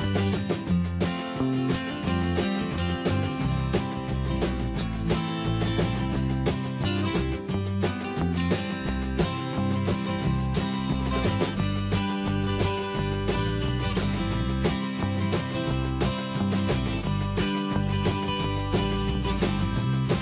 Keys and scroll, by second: 2.9 Return, 6.9 ctrl+[, 12.9 Return, 17.0 ctrl+z, 19.4 ctrl+space.